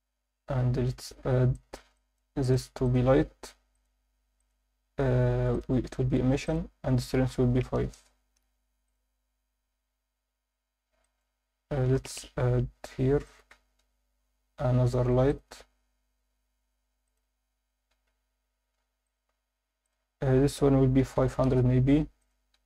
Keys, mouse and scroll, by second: 1.2 scroll up 4, 1.5 alt+shift+middle drag, 1.9 ctrl+alt+middle drag, 2.4 click, 2.9 click, 3.7 click, 4.4-5.6 drag, 6.4-7.9 drag, 8.9 click, 10.9 scroll down 3, 11.0 alt+shift+middle drag, 12.0 KP_1, 12.7 scroll down 1, 13.2 shift+right click, 13.7 shift+a, 16.3 r, 17.1 click, 17.3-17.9 scroll down 1, 17.9 scroll down 1, 17.9 g, 19.1 click, 19.8-21.4 drag, 21.1 0, 22.2-22.6 drag.